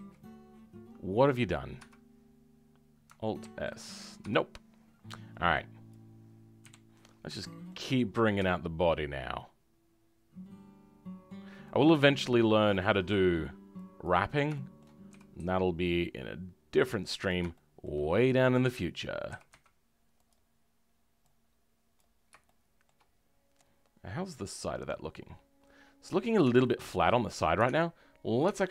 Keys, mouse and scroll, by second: 6.6 KP_1, 7.0-7.3 scroll up 2, 7.3 shift+middle click, 8.3 e, 14.5 shift+middle click, 15.1 g, 17.5-18.5 shift+middle drag, 18.5 click, 19.3 g, 21.9 click, 22.4 shift+middle click, 23.2 scroll down 4, 26.3 Tab, 26.5-28.7 middle drag.